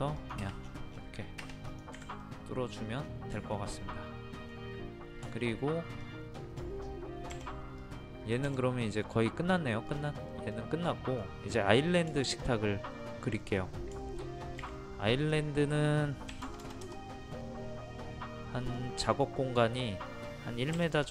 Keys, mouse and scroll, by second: 0.6-1.0 scroll down 1, 1.0 scroll up 1, 1.2-1.6 scroll down 1, 1.7 click, 2.0 Escape, 2.2 middle click, 2.7 scroll down 1, 3.4-4.8 shift+middle drag, 5.3 shift+middle click, 6.0 click, 7.3 Delete, 7.8 click, 8.5 Delete, 9.5 middle click, 9.9 click, 10.3 middle click, 13.7 scroll up 1, 14.0 shift+middle click, 15.2 click, 16.3 KP_6, 18.6 click, 20.7 KP_1.